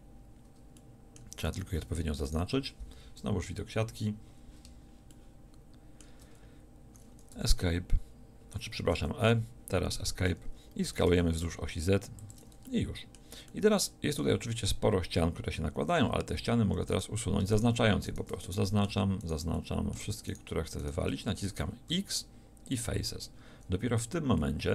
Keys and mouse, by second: 3.4 KP_1, 7.3 e, 11.1 s, 16.0 z, 16.9-18.5 drag, 21.9 x.